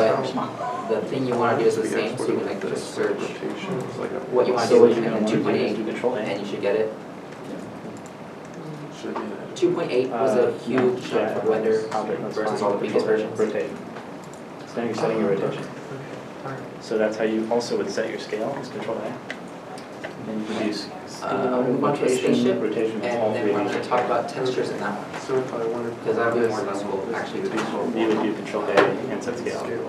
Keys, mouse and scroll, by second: 15.8 middle click, 16.5 middle click.